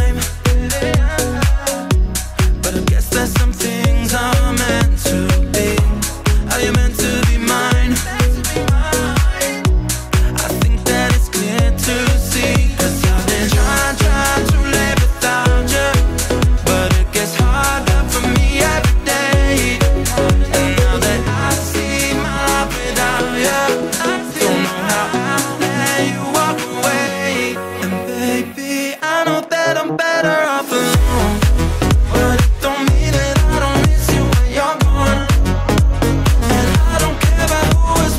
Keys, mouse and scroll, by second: 0.3 click, 4.0 click, 5.0 scroll up 2, 5.3 z, 6.1 scroll up 2, 6.4 drag, 6.7 middle click, 7.0 scroll down 1, 7.3 click, 9.4 click, 10.0 scroll up 1, 11.5-15.3 drag, 15.3 right click, 16.1 drag, 16.4-17.4 middle drag, 17.4 click, 17.8 middle click, 18.5-19.2 drag, 21.7 click, 22.6-25.2 drag, 25.3 middle click, 26.3 scroll down 1, 26.5 drag, 27.4 click, 28.1 scroll up 2, 28.5-29.0 middle drag, 29.0 z, 29.4 click, 29.9 z, 30.2 click, 30.5 shift+a, 31.1 shift+a, 32.4 shift+a, 32.6 scroll down 5, 33.3 g, 35.2-38.1 drag.